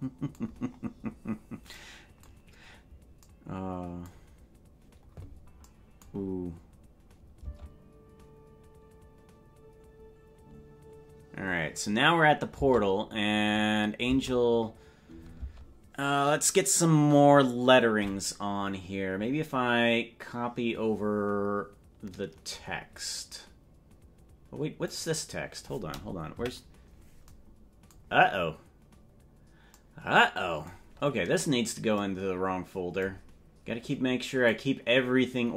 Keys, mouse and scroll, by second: 0.5-1.5 scroll down 14, 6.7-7.1 scroll up 4, 7.1 scroll down 1, 7.5 space, 12.7 space, 14.1 space, 15.5 space, 24.8 click, 26.3 KP_Decimal, 34.4-35.5 drag.